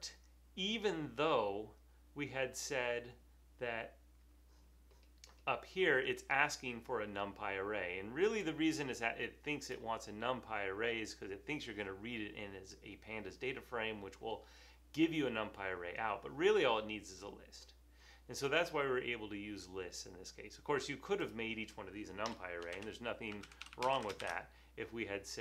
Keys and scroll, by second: 22.5-24.7 typing.